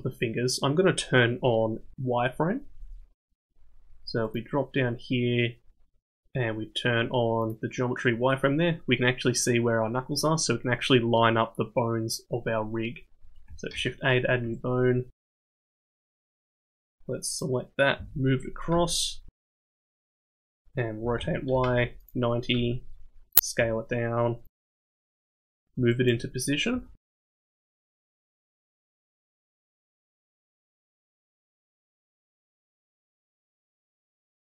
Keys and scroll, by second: 13.7 shift+a, 16.2 g, 18.0 g, 21.0 r, 22.5 s, 23.6 s, 24.6 g, 26.7 s, 28.3 g, 30.0 g, 33.8 g.